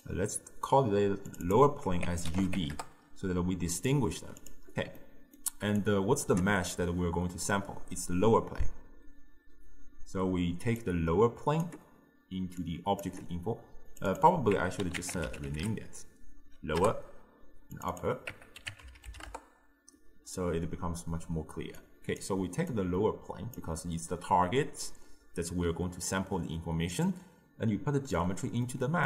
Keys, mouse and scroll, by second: 0.0 click, 1.4-3.9 drag, 4.4 click, 5.0 middle click, 5.8 click, 10.8 click, 12.7 click, 13.9 click, 14.2-17.3 drag, 17.8 click, 18.0-19.0 drag, 19.0 p, 21.9 click, 22.8 click, 27.1 drag, 28.7-29.0 middle drag.